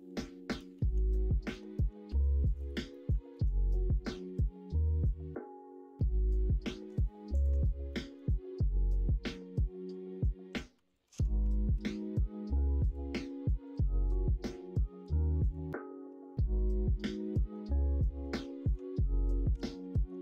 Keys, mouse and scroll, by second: 1.1 shift+middle click, 1.4 shift+click, 2.0 ctrl+r, 2.9 middle click, 3.3 ctrl+b, 7.9 middle click, 11.7 ctrl+b, 14.7 click, 17.0 middle click, 18.0 middle click, 19.6 alt+z, 19.8 middle click.